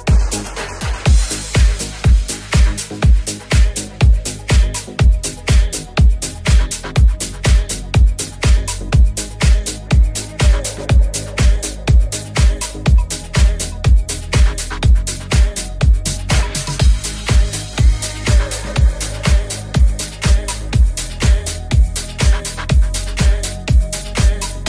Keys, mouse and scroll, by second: 2.2 right click, 2.3 middle click, 2.8 Tab, 3.1 alt+z, 5.1 middle click, 5.6 ctrl+middle click, 6.7 ctrl+middle click, 8.2-12.9 alt+middle drag, 9.0 alt+z, 9.0 s, 12.0 alt+z, 13.5-19.0 alt+middle drag, 13.8 alt+z, 13.8 g, 18.7 Tab, 20.2-21.8 middle drag, 21.9-23.0 middle drag, 23.2 middle click, 23.5-24.6 middle drag.